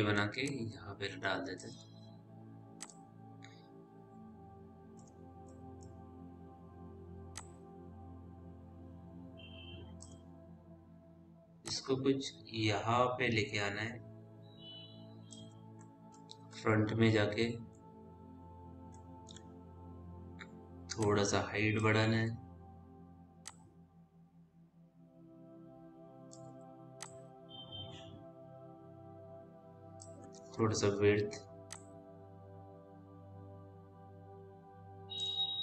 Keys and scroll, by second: 16.3 f, 22.4 r, 26.8 w, 30.4 r.